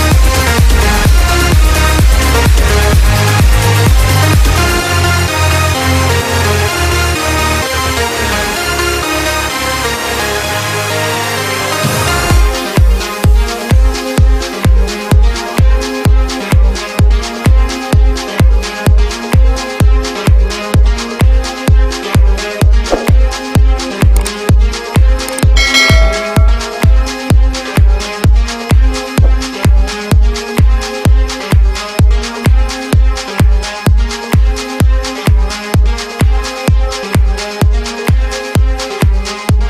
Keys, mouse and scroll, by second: 0.1 b, 0.5 right click, 2.3 b, 4.0 b, 4.7 b, 6.3 b, 11.6 b, 15.4 b, 17.7 b, 18.1 b, 19.1 b, 21.1 b, 21.3 right click, 21.7 b, 21.8 right click.